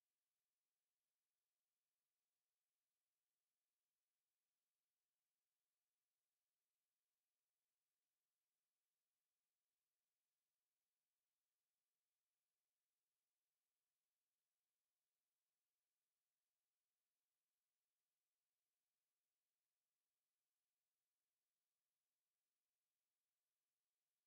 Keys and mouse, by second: 0.4 alt+middle click, 0.9 alt+click, 1.5 click, 1.9 alt+middle click, 2.7 click, 3.9 right click, 4.4 click, 6.7 middle click, 8.1 alt+click, 9.8 alt+h, 10.4 alt+click, 10.9 alt+right click, 11.2 alt+middle click, 12.8 alt+middle click, 13.7 right click, 14.7 click, 14.9 shift+right click, 19.2 alt+middle click, 19.8 alt+middle click, 20.5 alt+right click, 21.8 w, 22.4 shift+right click.